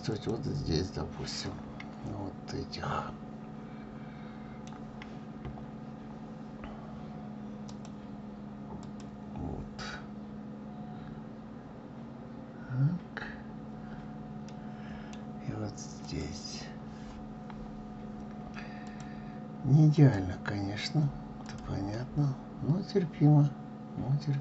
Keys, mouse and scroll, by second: 0.3 click, 1.5-4.5 middle drag, 5.3-5.7 scroll down 2, 7.9-14.6 drag, 14.6-16.2 middle drag, 16.2 click, 18.8 click, 20.1-21.6 drag, 22.1-24.4 middle drag.